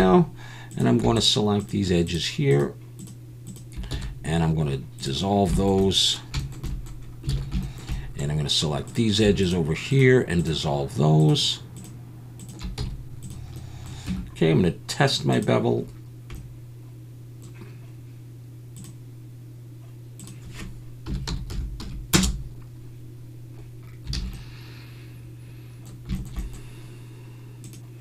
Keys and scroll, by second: 3.9 x, 7.3 alt+a, 12.8 x, 14.1 Tab, 24.1 alt+a.